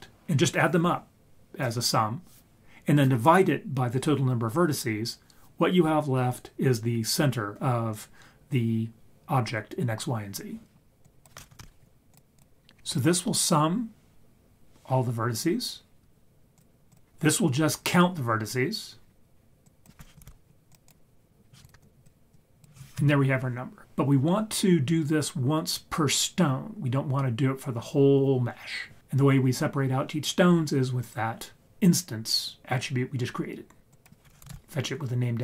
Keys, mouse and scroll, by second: 11.0-12.1 drag, 11.6 c, 12.6-12.9 scroll down 3, 12.8 scroll up 3, 16.6-16.9 drag, 19.7-20.7 drag, 21.6 ctrl+right click, 21.9 click, 22.3 drag, 33.9-35.4 drag.